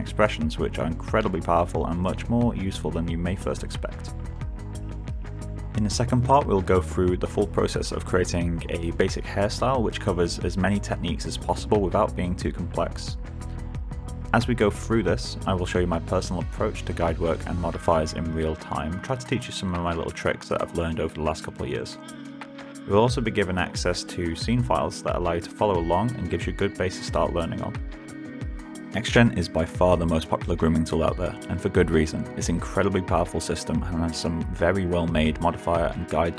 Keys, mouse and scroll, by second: 0.1 alt+click.